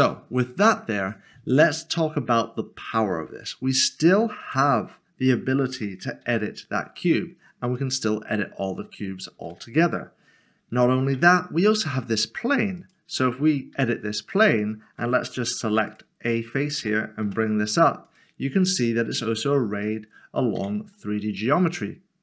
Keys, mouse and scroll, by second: 0.1 middle click, 3.4 middle click, 4.5 Tab, 6.2 g, 7.0 click, 7.8 middle click, 9.3 ctrl+z, 11.2 Tab, 11.7 middle click, 12.8 middle click, 12.9 click, 13.3 middle click, 13.7 Tab, 14.5 middle click, 15.8 3, 16.3 click, 17.3 typing, 18.1 click, 18.6 middle click, 20.9 Tab, 21.1 middle click.